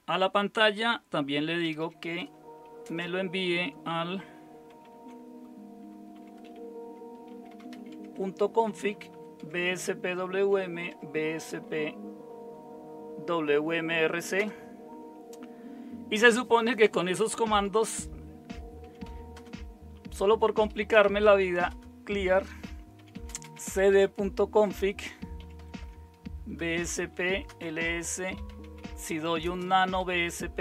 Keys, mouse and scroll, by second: 1.6-2.9 typing, 4.8 typing, 6.1-11.1 typing, 14.4 Return, 18.6-19.5 typing, 20.7-25.9 typing, 26.6 Return, 26.9-30.3 typing.